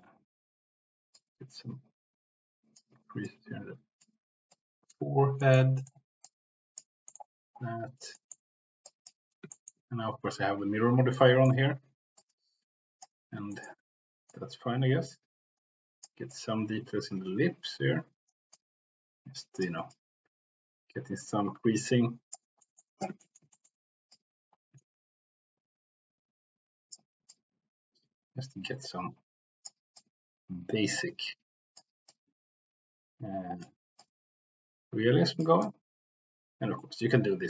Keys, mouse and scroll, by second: 1.1-2.8 drag, 3.2 click, 4.5 click, 5.4 middle click, 5.7 middle click, 6.2 click, 7.0 middle click, 8.2 middle click, 8.8 click, 9.5 shift+middle click, 11.1 middle click, 12.1 click, 13.5 shift+middle click, 14.2-16.0 drag, 16.3-18.3 drag, 18.5-19.6 drag, 19.9-22.3 drag, 22.6 middle click, 23.2 shift+middle click, 23.5 middle click, 24.0-26.9 drag, 27.3-29.7 drag, 30.0-31.7 drag, 32.1-33.6 drag, 34.0-35.4 drag, 35.6-37.4 drag.